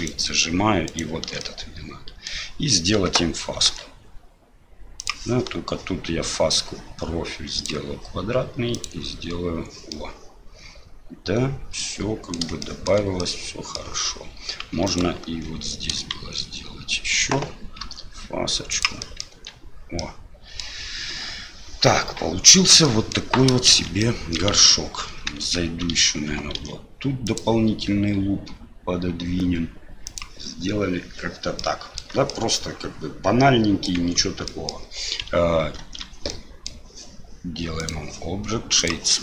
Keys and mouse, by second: 0.8 alt+shift+click, 1.4 middle click, 3.6 ctrl+b, 6.5-7.6 drag, 8.7 click, 10.0-12.4 middle drag, 12.7 shift+click, 13.3 middle click, 14.8 alt+click, 16.1 shift+z, 17.8 ctrl+b, 19.1 click, 19.3 Tab, 20.0-20.6 drag, 22.8 middle click, 23.7 shift+z, 24.0 middle click, 25.4 Tab, 26.5 ctrl+r, 31.7 click, 32.3-33.9 drag, 33.9 Tab, 34.5 click, 35.8 ctrl+2, 36.3-36.7 drag, 37.8-38.9 drag.